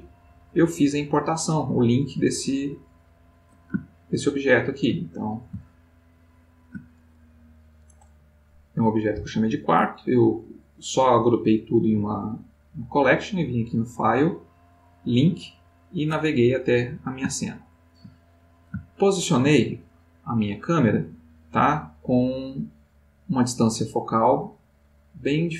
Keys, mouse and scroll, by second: 3.8-4.3 ctrl+middle drag, 4.3 ctrl+middle click, 5.1-6.8 ctrl+middle drag, 13.7 click, 16.7-20.2 middle drag, 21.4-23.1 middle drag, 23.2 click.